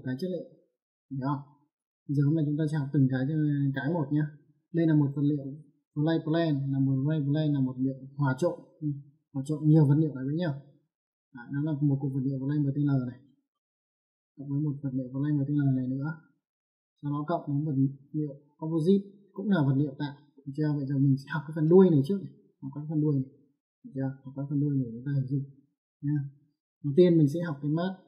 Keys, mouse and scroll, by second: 0.6 middle click, 3.8 click, 5.4 click, 11.8 click, 13.3 middle click, 14.6 click, 16.0 middle click, 17.9 click, 19.5 click, 21.0 middle click, 23.4 click, 25.0 middle click.